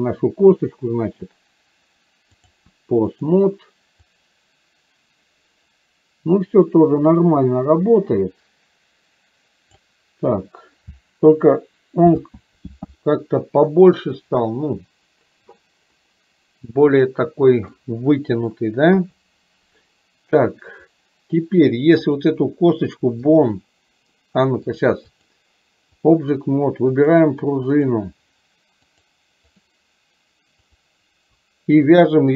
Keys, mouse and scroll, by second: 1.2-2.6 drag, 3.2 click, 4.2-9.9 drag, 16.0-17.9 middle drag, 21.0 click, 22.1 click, 23.5 click, 24.7 click, 25.4 click, 27.0 click, 27.9 click, 29.0 click.